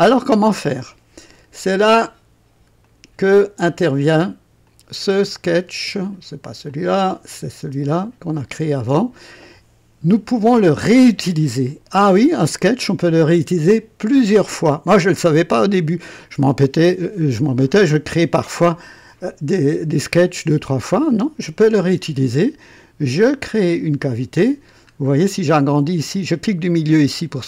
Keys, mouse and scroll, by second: 2.8 click, 4.6 click, 5.1 space, 5.8 space, 6.6 click, 7.3 click, 7.6 space, 15.8 scroll up 1, 16.4 right click, 23.6 click, 24.8-25.1 scroll up 1, 25.5 right click, 26.8 middle click.